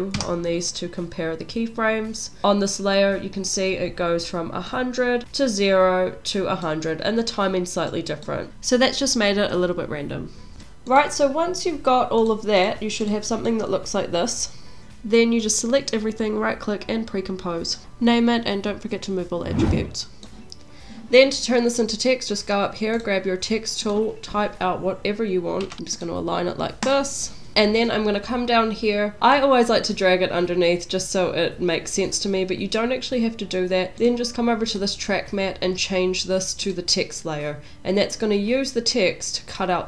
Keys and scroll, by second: 2.4 u, 17.2-18.9 typing, 25.4-26.2 typing.